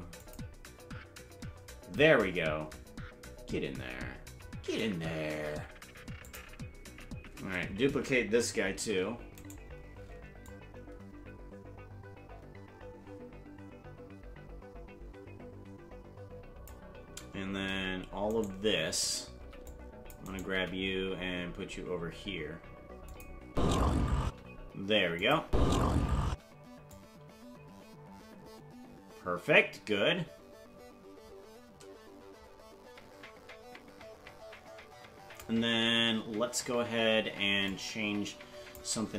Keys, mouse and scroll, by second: 2.6 scroll up 6, 6.2 click, 8.9 shift+d, 10.4-16.7 drag, 17.6 a, 18.2 right click, 19.3 c, 20.5 g, 23.5 space, 24.2 space, 25.2 click, 25.4 space, 26.3 space, 26.9-35.4 drag, 36.0 scroll up 1, 37.7-38.8 drag.